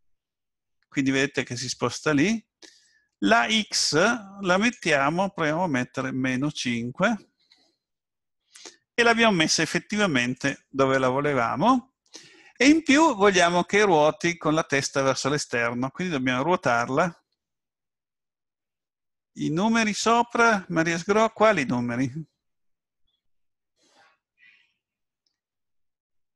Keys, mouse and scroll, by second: 4.5 click, 10.4 click.